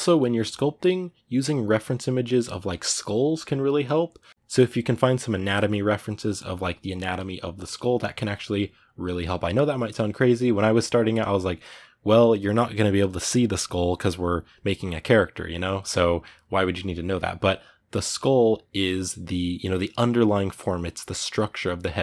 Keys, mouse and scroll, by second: 3.6-22.0 middle drag.